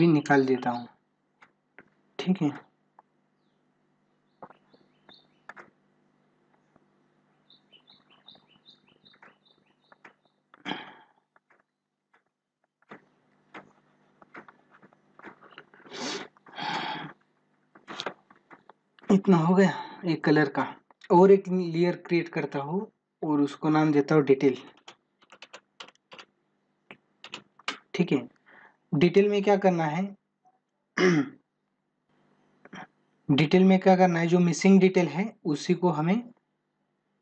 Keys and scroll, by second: 35.8 ctrl+=.